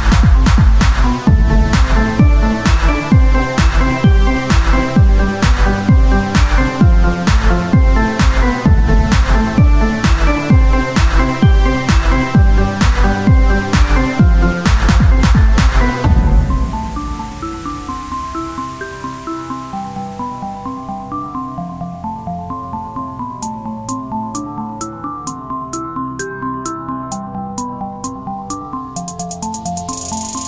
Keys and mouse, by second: 8.6-9.6 right drag, 8.7 z, 9.0 c, 9.7-12.1 drag, 9.7-11.5 right drag, 10.0 z, 12.1 c, 12.6 z, 13.0-14.2 drag, 14.2 c, 15.0-16.5 drag, 16.0 z, 16.9-19.0 drag, 17.4 right click, 18.4 z, 19.0 o, 20.0 click, 20.0 z, 20.7 s, 22.4-26.0 right drag, 22.9-26.9 drag, 26.3 Tab, 28.3-30.4 drag, 28.3 right click, 28.9 Tab.